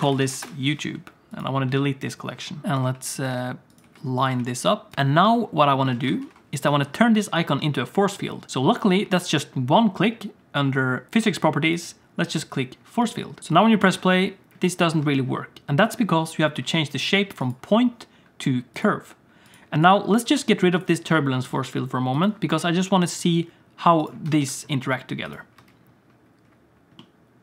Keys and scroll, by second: 1.6-4.3 typing, 5.9 alt+a, 6.2 ctrl+s, 13.9 space, 15.0 space, 21.1 x, 24.2 Tab, 24.4 Tab, 25.5 space.